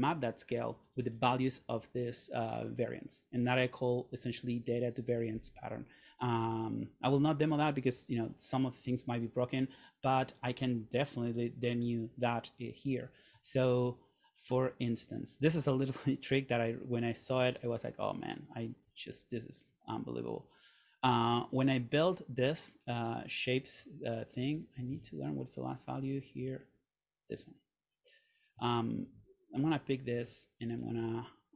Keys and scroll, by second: 25.1 super+z.